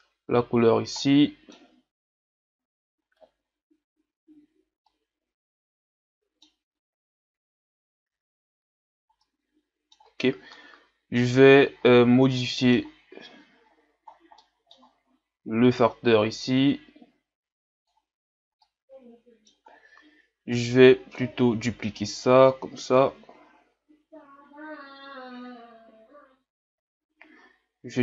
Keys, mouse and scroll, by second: 4.9-18.1 middle drag, 18.1 click, 18.6-20.5 middle drag, 20.5-26.2 drag.